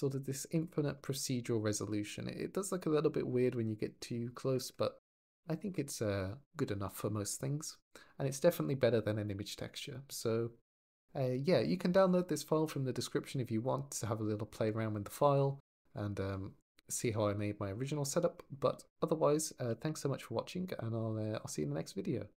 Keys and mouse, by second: 2.9 middle drag, 3.8 click, 4.7 middle click, 18.2 click, 19.5 ctrl+s.